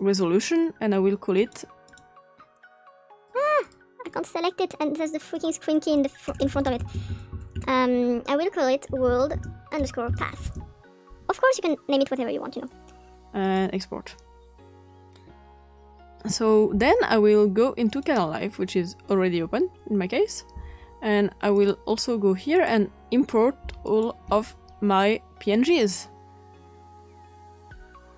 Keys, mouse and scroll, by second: 1.3 click, 1.8 click, 2.6 click, 3.6 click, 4.0 click, 4.2 click, 5.3 click, 6.4-7.5 typing, 8.9-11.0 typing, 13.4 click, 14.8 click, 15.2 click, 18.3-19.3 drag, 21.9 click, 22.5 click, 23.8 shift+click, 25.6-27.4 drag, 28.1 click.